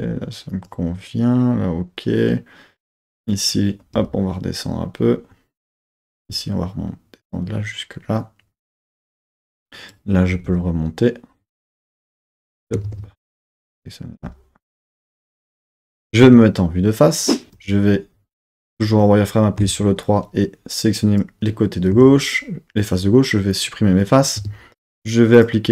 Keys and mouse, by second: 0.6 click, 3.3 click, 4.0 g, 5.6 click, 6.0 click, 6.2 g, 8.9 click, 9.7 click, 10.3 g, 10.5 g, 11.4 click, 11.8 click, 12.1 g, 12.5 click, 12.9 super+z, 13.4 click, 14.2 g, 15.2 click, 16.2 KP_1, 17.6 z, 19.6 3, 20.0-21.4 drag, 21.9 x, 24.3 Tab, 25.3-25.7 drag.